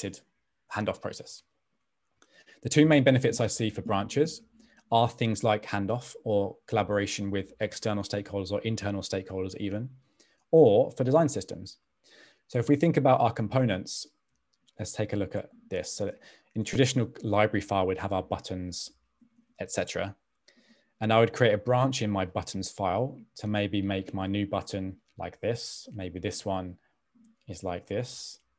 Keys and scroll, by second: 19.4 super+d, 27.4-28.3 typing.